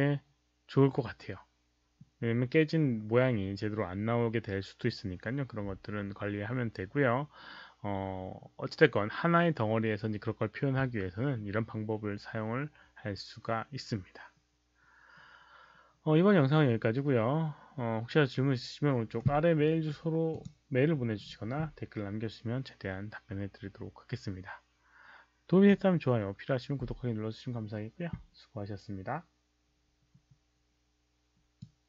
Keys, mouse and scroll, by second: 20.3 click, 23.0 click, 31.5 click.